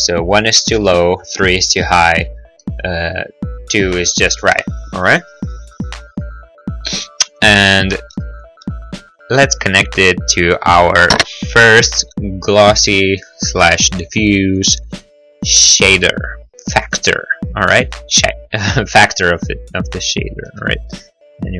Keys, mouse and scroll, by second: 0.4 click, 0.8 Return, 0.8 3, 1.4 click, 1.6 click, 1.8 Return, 1.8 2, 2.8 middle click, 3.6 middle click, 3.7-4.2 scroll, 4.3 click, 5.0 click, 9.2 click, 14.5 click.